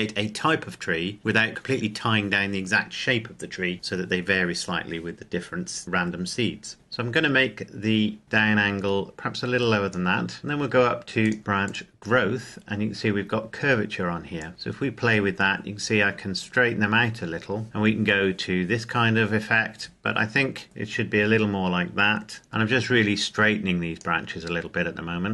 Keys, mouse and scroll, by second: 8.2 click, 14.3 click, 22.4 click.